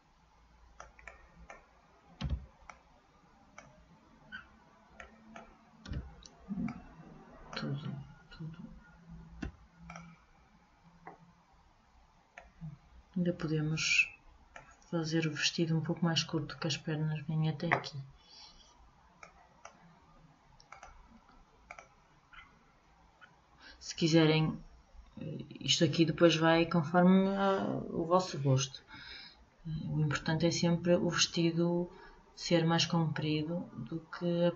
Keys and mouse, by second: 1.2-7.9 middle drag, 2.4 b, 6.0 b, 9.6 Delete, 12.5-14.3 drag, 19.4-20.9 drag, 21.9 click, 22.7-27.2 middle drag.